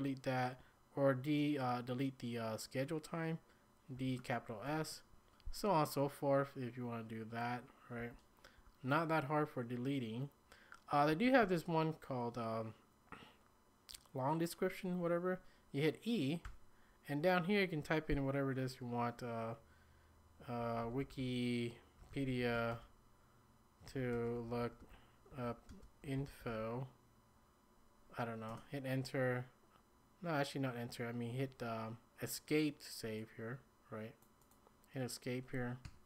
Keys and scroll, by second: 3.9 d, 4.7 shift+s, 8.0 k, 8.6 j, 11.1 k, 16.4 e, 20.4-27.0 typing, 28.5 Return, 28.8 typing, 35.8 Escape.